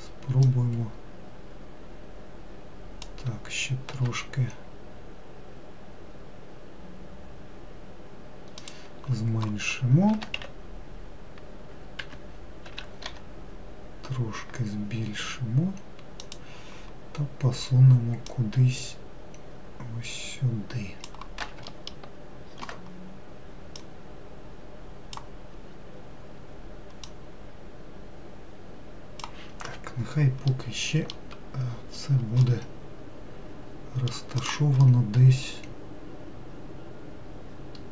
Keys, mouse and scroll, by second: 0.7 click, 4.2 s, 10.4 s, 13.0 s, 18.5 click, 22.0 alt+middle click, 24.0 click, 26.0-26.3 scroll up 2, 27.3 click, 30.8-32.0 middle drag, 32.0-32.7 scroll down 5, 32.7-34.6 middle drag, 34.6 click, 35.1-37.9 middle drag.